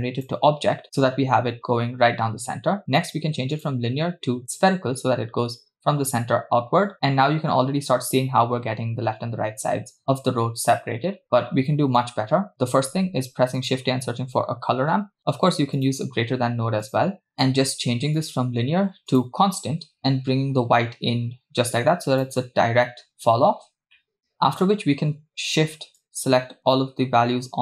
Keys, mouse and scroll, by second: 3.6-4.9 drag, 11.2-12.0 scroll down 4, 12.1-12.5 drag, 12.9 shift+a, 17.3 scroll up 3, 17.4 middle click, 18.2-19.5 drag, 20.0-22.3 drag, 24.0 middle click, 26.0-27.6 shift+drag.